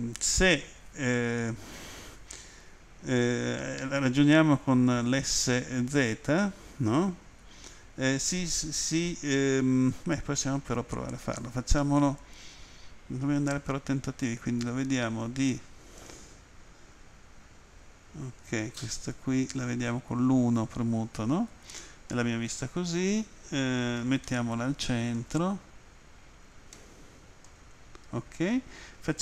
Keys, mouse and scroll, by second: 14.6 End, 16.2-16.7 scroll down 2, 24.3 shift+middle click, 25.5 scroll up 1, 26.8 shift+middle click.